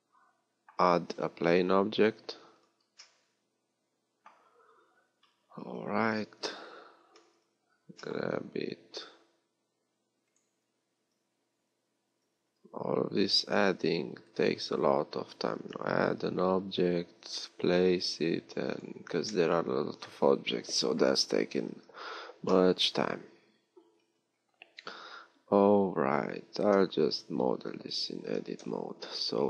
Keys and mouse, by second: 1.7 shift+a, 5.7 z, 5.9 KP_3, 7.7 g, 10.9-12.4 drag, 12.4 g, 15.5 g, 21.7 z, 27.0 Tab, 27.9 z, 28.5 KP_7.